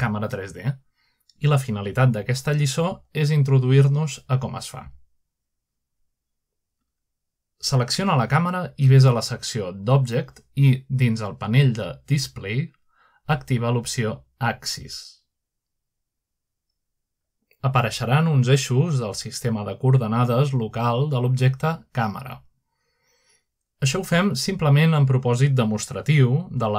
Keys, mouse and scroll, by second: 8.2 click, 10.2 click, 10.7 click, 11.5 click, 12.0 click, 12.7 click, 15.3 click, 15.9-17.1 scroll down 2, 17.5-18.4 drag, 20.4-21.2 scroll up 2, 20.8-21.9 shift+middle drag, 21.8-22.5 scroll up 1, 22.4-23.2 shift+middle drag, 23.1-23.6 scroll down 1, 25.6 middle click.